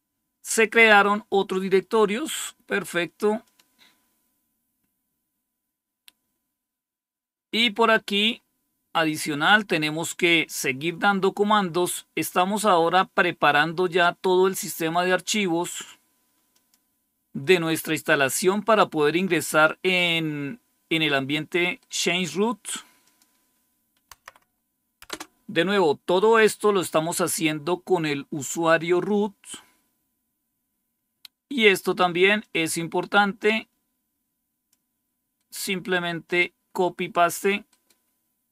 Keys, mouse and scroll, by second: 3.3-4.3 drag, 4.3-4.9 scroll down 1, 4.9-7.6 scroll down 1, 7.6-8.2 scroll down 1, 8.2-9.2 scroll up 2, 9.9-10.5 scroll down 2, 11.7-14.5 drag, 15.6 right click, 16.4 click, 16.7 click, 21.6 right click, 22.9 click, 24.0 Tab, 24.9 Return, 28.3 click, 29.2-29.7 scroll down 2, 32.3-34.6 drag, 35.2 right click, 36.1 click, 36.8 click, 37.6 right click.